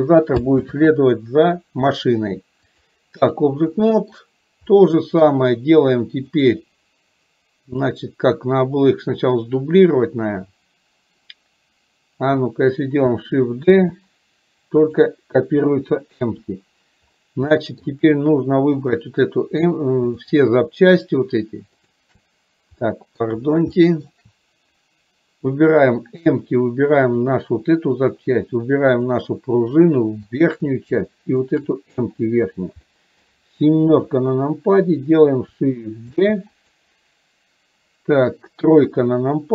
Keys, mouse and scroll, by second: 2.9 click, 3.9-4.3 middle drag, 4.8-5.3 middle drag, 6.4 click, 7.9-11.3 middle drag, 14.0 shift+d, 17.8 shift+middle drag, 19.0 click, 22.9-23.3 middle drag, 23.9 shift+middle drag, 29.1 shift+click, 30.4 shift+click, 31.6 shift+click, 33.0 middle click.